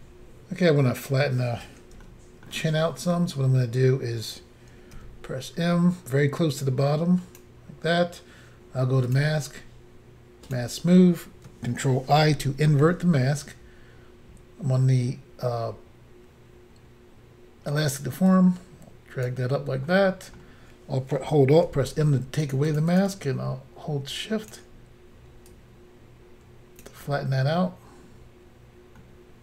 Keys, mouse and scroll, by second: 0.8-2.1 scroll up 1, 2.1 shift+middle click, 2.8-3.7 scroll up 2, 5.0 b, 6.6 click, 9.1 click, 9.1 click, 10.5 click, 10.5 click, 12.3 ctrl+i, 18.3 click, 19.9 middle click, 21.7 alt+m, 22.5 shift+click, 22.6 shift+click, 22.7 shift+click, 22.8 shift+double click, 23.0 shift+click, 23.0 shift+click, 23.1 shift+click, 25.5 shift+click, 29.0 middle click.